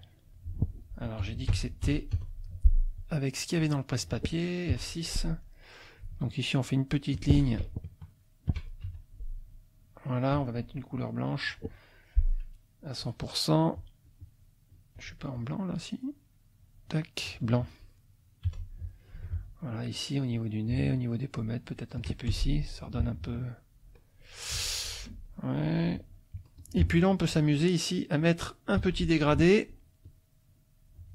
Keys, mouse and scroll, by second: 1.2 F1, 2.1 F6, 3.0-4.2 drag, 4.7 F6, 5.4 middle click, 6.4 shift+click, 7.4 ctrl+shift+z, 7.9 ctrl+shift+click, 8.8 shift+F2, 9.4 click, 10.9 click, 15.0 click, 16.6 click, 17.3 F1, 18.4 F6, 19.7 shift+click, 20.8 shift+click, 21.7 shift+click, 22.3 shift+F1, 24.1 click, 24.5 F2, 25.0 click, 25.6 click, 26.3 F2, 26.6 click, 28.8 g, 30.0-31.1 drag.